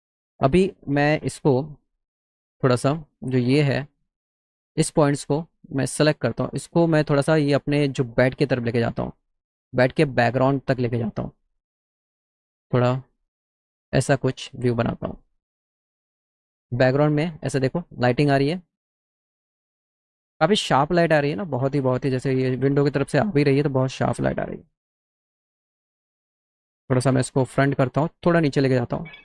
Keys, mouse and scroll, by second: 1.5 middle click, 1.8 t, 2.7 middle click, 3.7 click, 5.9-7.3 drag, 11.4 click, 12.4 click, 13.5-16.2 drag, 25.4 g, 28.2 click.